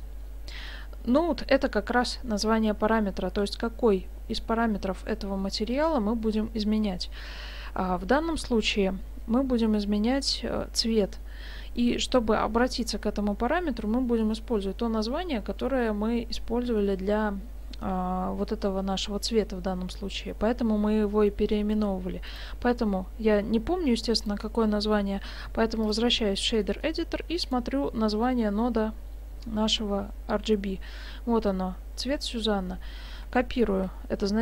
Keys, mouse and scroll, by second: 0.5 middle click, 22.3 click, 24.2 click, 26.6 middle click, 27.4 right click.